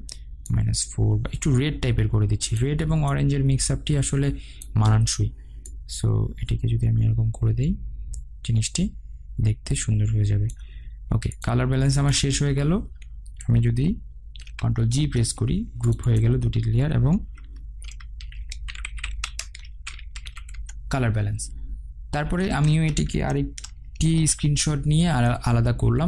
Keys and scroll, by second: 14.7 ctrl+g, 20.7 Return, 24.2 ctrl+alt+shift+e.